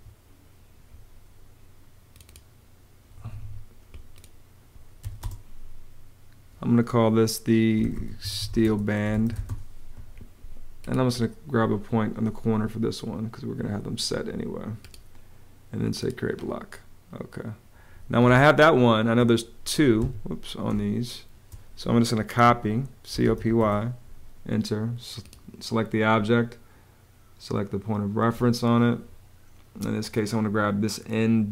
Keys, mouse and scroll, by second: 2.9 Escape, 4.7 b, 4.9 space, 7.3-9.7 typing, 18.0 space, 19.7 Escape, 20.4 space, 20.9 space, 22.2-23.6 typing.